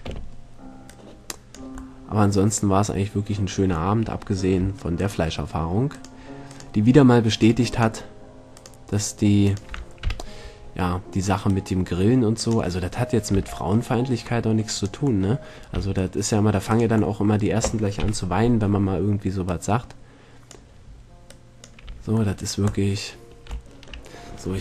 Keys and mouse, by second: 0.3 b, 2.1 middle click, 5.1-10.3 middle drag, 10.2 KP_7, 13.5 c, 15.4-19.1 middle drag, 15.9 c, 18.2 KP_7, 22.1 c.